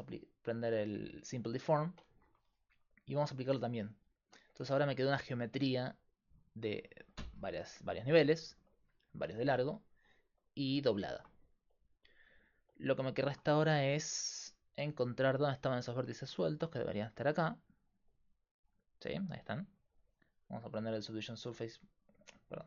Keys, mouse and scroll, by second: 0.3-1.6 drag, 3.6 click, 4.5 Tab, 16.2-17.5 right drag, 19.0 click, 22.1-22.6 drag.